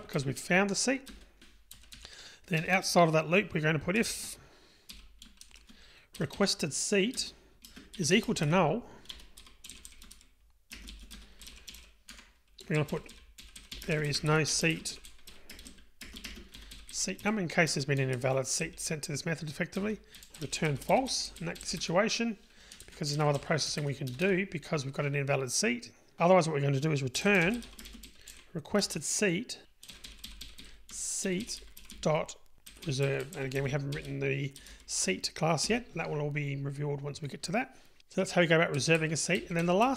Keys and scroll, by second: 1.1 Return, 7.2 Return, 12.3 Tab, 17.8 Return, 23.5 Delete.